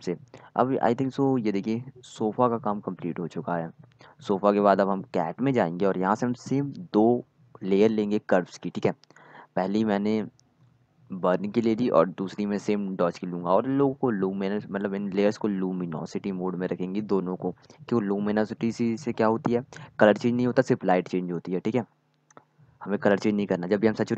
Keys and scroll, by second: 12.0-13.4 typing, 13.5 Return, 23.1-24.1 typing.